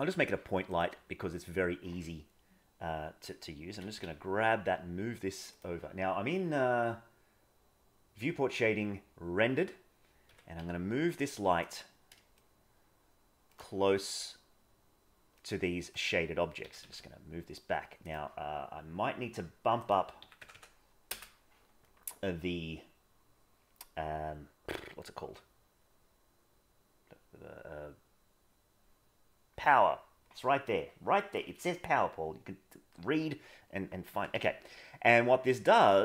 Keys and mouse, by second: 3.7 g, 10.2 g, 12.4-13.5 middle drag, 15.3-15.9 middle drag, 16.6 g, 19.9-21.1 drag, 20.5 KP_0, 34.1 g.